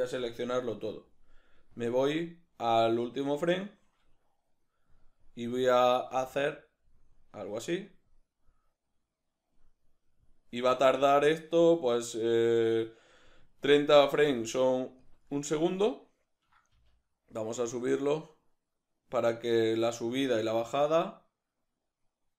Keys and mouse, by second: 0.1 a, 4.5 right click, 6.1 g, 9.5 click, 10.9 g, 13.2 click, 13.6-15.1 shift+middle drag, 14.2 g, 15.1 click, 15.9-22.3 ctrl+middle drag, 16.9 g.